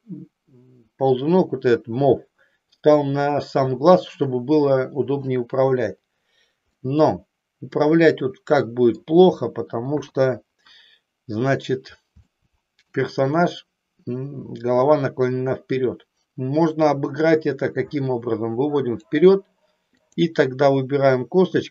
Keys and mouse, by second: 6.8-9.2 middle drag, 10.2 KP_3, 12.4 shift+middle click, 16.7-19.2 drag, 20.1 click.